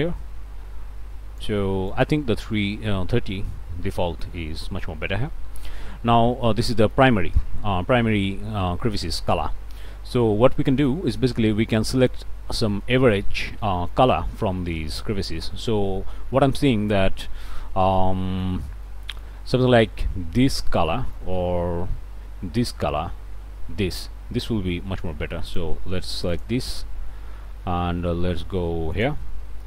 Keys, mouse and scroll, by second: 1.9 click, 3.1 3, 3.3 0, 3.8 Return, 9.8-10.1 scroll up 1, 10.6 middle click, 11.2 scroll up 1, 11.6 middle click, 12.1 scroll down 1, 12.4 click, 12.5 middle click, 13.0 click, 13.2-13.6 scroll up 1, 13.6 middle click, 14.1-15.2 drag, 15.2 scroll down 1, 15.4 click, 15.6-17.2 middle drag, 17.9 click, 17.9 scroll up 1, 18.9 click, 20.8 click, 26.3 click.